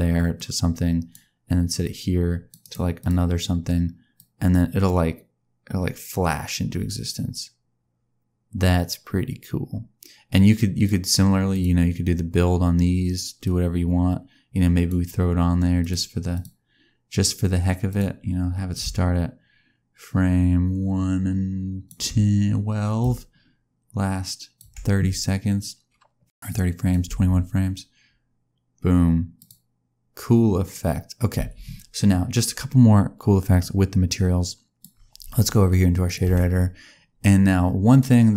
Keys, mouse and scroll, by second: 0.3 click, 1.8 click, 2.6 right click, 4.1 click, 11.4 click, 13.4 click, 15.7 click, 16.3 click, 18.7 click, 22.9 click, 26.4 click, 27.0 space, 29.3 click, 31.3 space, 33.6 click, 36.0 click, 37.8 click.